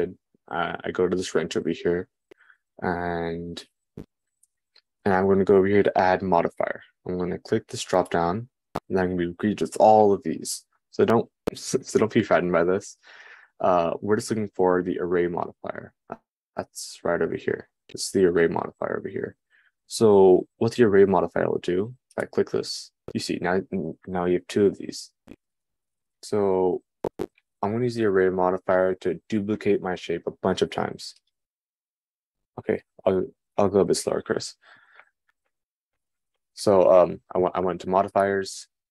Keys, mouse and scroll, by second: 7.7-26.8 right drag, 26.8-38.9 drag.